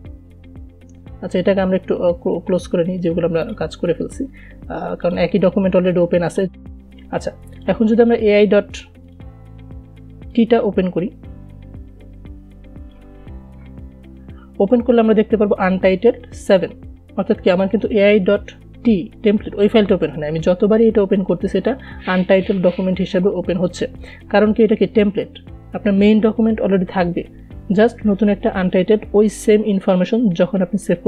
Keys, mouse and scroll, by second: 1.8-15.9 drag, 22.1 click.